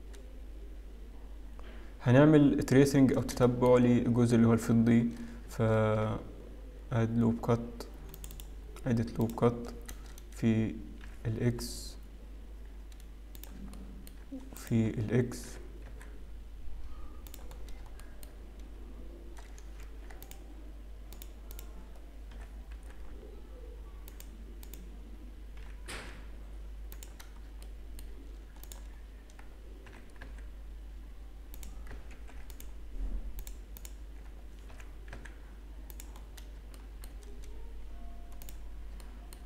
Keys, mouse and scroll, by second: 0.7-1.2 scroll up 2, 1.2-1.7 scroll up 2, 1.7-2.4 scroll down 2, 2.4-3.3 scroll up 1, 3.4 shift+middle click, 5.7 ctrl+r, 8.8-10.1 scroll up 1, 10.1 click, 10.1-10.7 scroll up 2, 11.7 g, 13.7 shift+middle click, 14.8 click, 15.5 g, 17.8-18.4 scroll down 2, 18.4 shift+middle click, 18.4 scroll up 2, 19.8 ctrl+r, 21.5 click, 22.4 g, 24.7 click, 26.1 g, 27.4-27.9 scroll down 2, 27.9 shift+middle click, 28.6 click, 28.9-29.4 scroll up 3, 30.0 g, 32.1 ctrl+r, 33.7 click, 34.9 g, 36.2 scroll down 2, 36.7 scroll down 2, 37.1 shift+middle click, 37.4-37.9 scroll up 2, 38.4 click, 38.9 shift+scroll up 1, 39.1 shift+middle click.